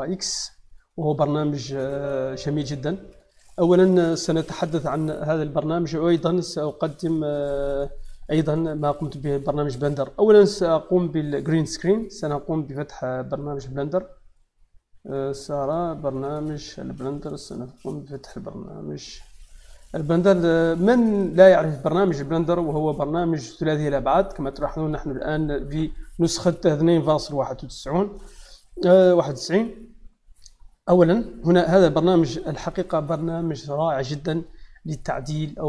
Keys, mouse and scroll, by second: 0.6 click, 11.8 click, 15.0 click, 16.1 click, 18.0 click.